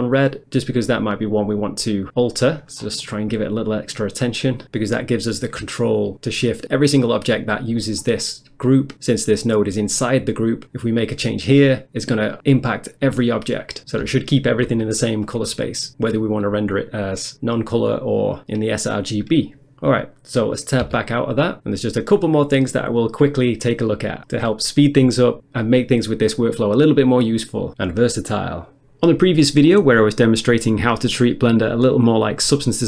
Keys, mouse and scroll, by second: 0.1 click, 2.4 middle click, 2.6 middle click, 2.8 scroll down 1, 3.1 middle click, 3.3 middle click, 9.7 click, 20.9 Tab.